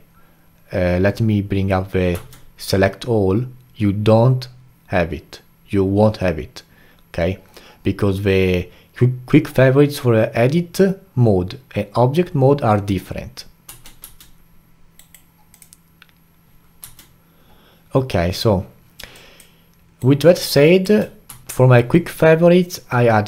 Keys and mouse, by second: 2.1 q, 13.7 Tab, 14.0 q, 16.8 q, 19.1-20.0 alt+drag, 20.0-21.3 alt+right drag, 21.3 q.